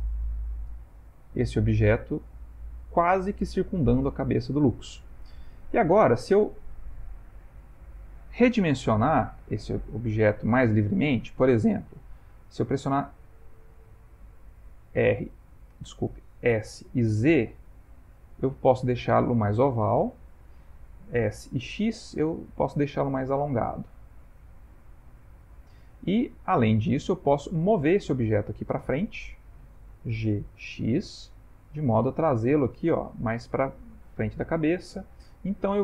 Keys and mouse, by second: 2.6 middle click, 5.5 ctrl+middle click, 6.0 ctrl+middle click, 6.4 shift+middle click, 6.7 shift+middle click, 7.0 ctrl+middle click, 7.0 ctrl+middle click, 7.6 shift+middle click, 8.5 shift+middle click, 8.8 ctrl+middle click, 11.6 middle click, 13.1 middle click, 14.9 r, 15.9 ", 16.7 s, 21.1 s, 24.3 s, 25.9 middle click, 28.5 middle click, 28.6 middle click, 30.1 g, 35.2 s.